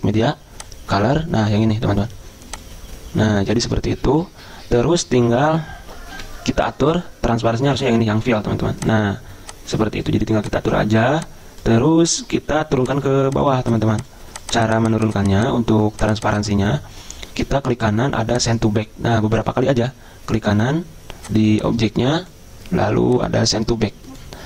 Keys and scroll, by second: 6.2 F10.